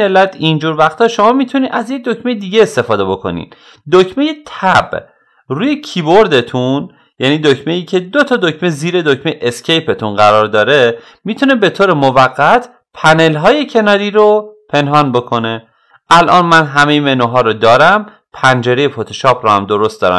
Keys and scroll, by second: 5.2 Tab.